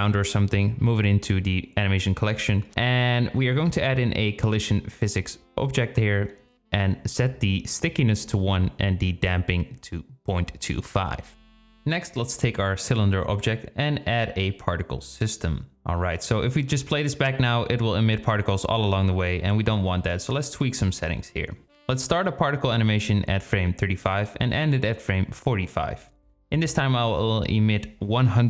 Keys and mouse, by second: 0.0 click, 0.3-2.3 drag, 2.4-2.9 drag, 5.3 click, 5.9 click, 7.4-8.6 drag, 9.1-10.4 drag, 14.6 click, 15.8 click, 16.2-20.2 drag, 19.0 KP_0, 21.2-23.9 drag, 24.5-26.8 drag, 27.2-28.4 drag.